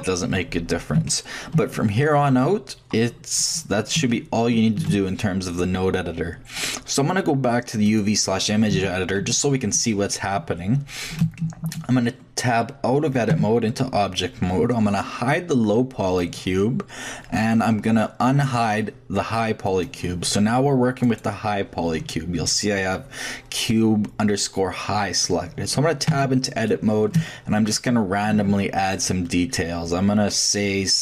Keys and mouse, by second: 0.9-4.1 shift+middle drag, 8.7 a, 9.2 a, 11.2 shift+middle click, 12.6 shift+middle click, 13.3 shift+Tab, 16.2-18.0 drag, 19.6-21.0 drag, 21.0-21.6 middle drag, 21.6-22.9 drag, 26.1 Tab, 26.8 middle click, 27.1 shift+click, 27.3 middle click, 27.4 click, 27.5 middle click, 28.3 a.